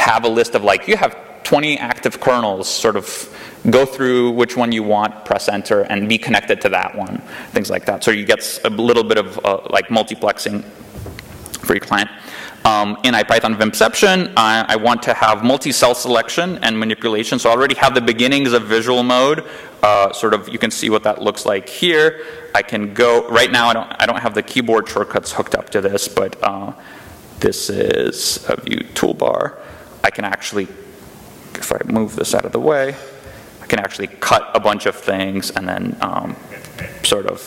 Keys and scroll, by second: 36.8 k.